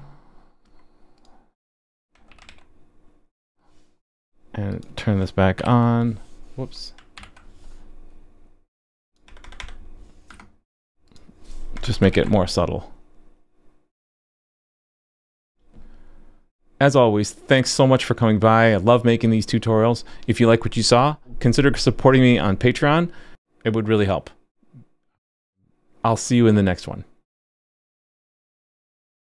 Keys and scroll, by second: 2.5 super+s, 5.6 super+/, 7.1 super+/, 12.1 super+s.